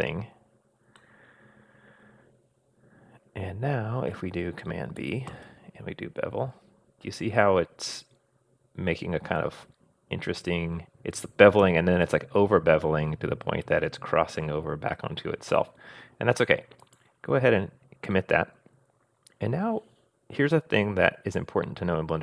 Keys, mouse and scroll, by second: 1.0-4.1 middle drag, 5.3 super+b.